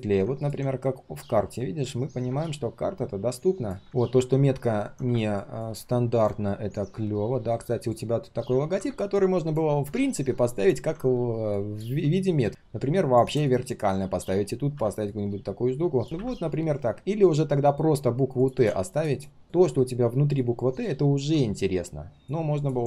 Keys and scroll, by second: 8.2 ctrl+c, 10.7 ctrl+v, 16.0 ctrl+].